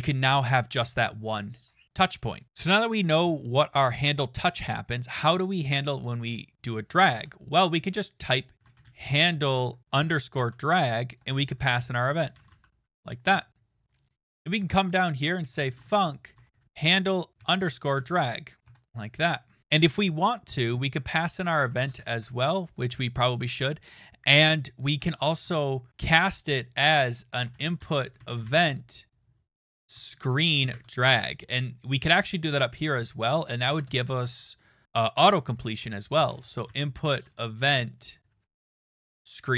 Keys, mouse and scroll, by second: 2.4 click, 6.2 click, 7.1 Return, 8.3-12.9 typing, 13.8 middle click, 13.9 middle click, 14.2 click, 14.6-17.2 typing, 14.9 Return, 20.4 Right, 20.4 Return, 20.4-22.6 typing, 20.7 click, 21.2 click, 24.1-25.9 typing, 27.1-30.6 typing, 30.7 Tab, 32.9 click, 33.4-34.2 typing, 35.9-39.4 typing.